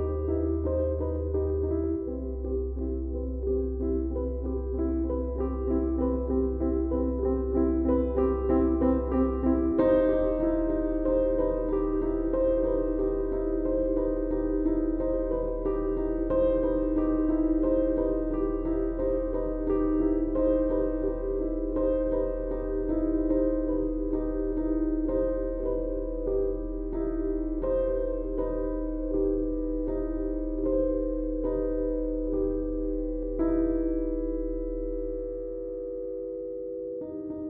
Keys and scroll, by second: 3.5 Tab, 35.0 s.